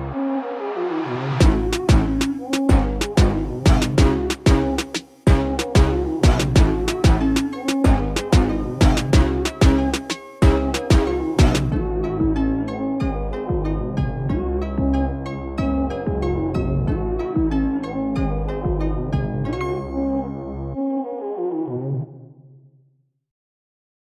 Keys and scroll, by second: 13.2 KP_4, 17.3 Down.